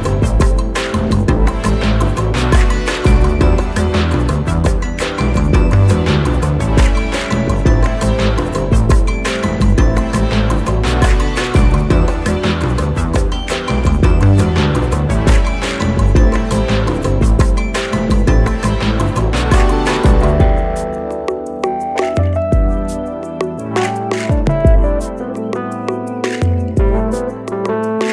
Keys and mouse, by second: 5.5 Up, 8.6 click, 12.8 alt+Num_Lock, 12.8 click, 13.2 alt+click, 16.3-17.2 drag, 19.5-21.5 drag, 25.1 click, 25.1-26.8 drag.